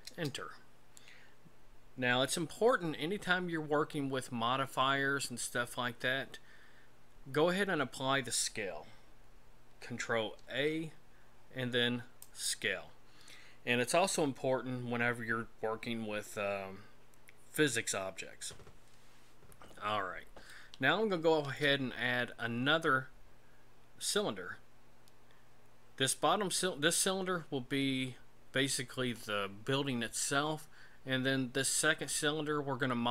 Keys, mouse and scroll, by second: 10.4 ctrl+a, 20.5 shift+middle click.